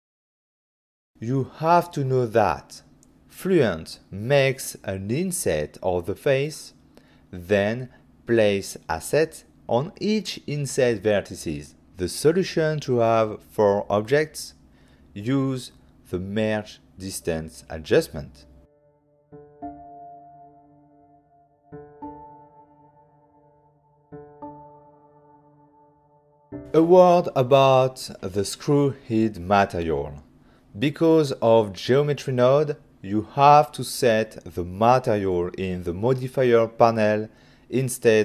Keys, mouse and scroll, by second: 0.9 click, 2.7 click, 10.4 click, 14.7 click, 21.3 click, 22.6 click, 25.0 click, 29.2 click, 34.7 click.